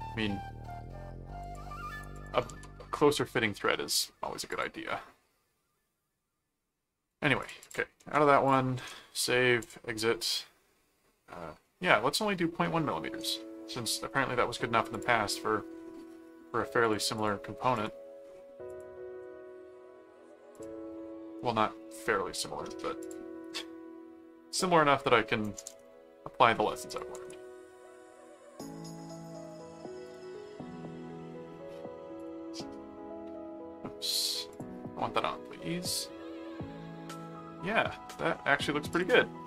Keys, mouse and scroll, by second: 1.4 click, 2.1 ctrl+click, 2.5 ctrl+s, 4.5 click, 7.4 click, 8.0 ctrl+7, 8.5 ctrl+click, 8.8 ctrl+s, 9.6 click, 11.6 middle click, 12.6 middle click, 14.9 click, 16.8 click, 17.8 click, 18.7 click, 20.5 click, 23.0 click, 23.5 middle click, 24.5 click, 26.9 ctrl+click, 27.4 ctrl+s, 29.3 ctrl+Tab, 30.1 ctrl+click, 32.2 click, 34.5 click, 36.8 middle click, 38.9 click.